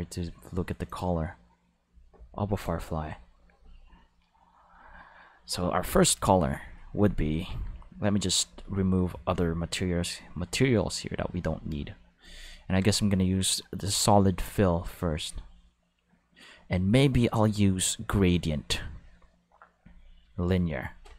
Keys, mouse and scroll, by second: 0.9 click, 2.6 click, 6.5 click, 8.4 click, 9.2 click, 10.5 click, 11.4-12.2 drag, 12.8 click, 17.2 click, 18.0 click, 19.8 click, 20.2-20.9 drag.